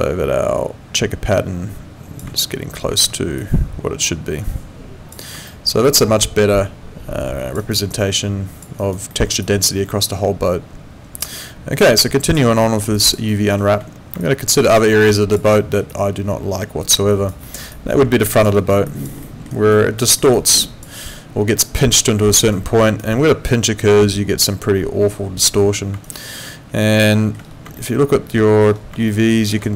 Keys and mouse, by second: 3.0 w, 3.4 click, 5.5 alt+middle click, 5.9 alt+click, 7.6 alt+right click, 7.9 alt+click, 8.8 alt+right click, 9.1 alt+middle click, 9.4 alt+click, 12.1 click, 12.6 alt+middle click, 13.0 alt+click, 13.3 alt+middle click, 14.2 alt+click, 15.5 alt+middle click, 15.9 alt+click, 17.1 alt+right click, 17.4 alt+middle click, 17.7 alt+click, 18.6 alt+right click, 18.9 alt+click, 19.2 alt+middle click, 19.5 alt+right click, 20.0 alt+middle click, 20.3 alt+click, 22.5 alt+right click, 26.1 alt+right click, 27.0 alt+middle click, 27.8 alt+middle click, 29.1 alt+middle click.